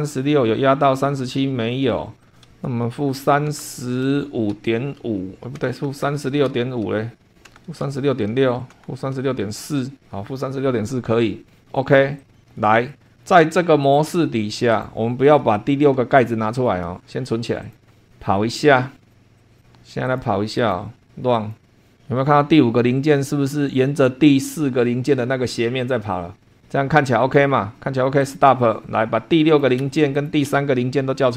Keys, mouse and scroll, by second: 0.3-0.6 scroll up 1, 2.2 click, 3.0 BackSpace, 4.3-9.4 typing, 11.6 click, 12.2 click, 12.3-12.7 scroll down 1, 12.9 shift+click, 13.8 click, 14.1 space, 14.7 click, 15.5 scroll down 1, 16.1 shift+click, 17.6 click, 19.1 click, 19.4 click, 20.0 click, 20.6 click, 21.3 click, 28.2 click, 29.5 click, 29.8 space, 30.2 click, 30.5 space.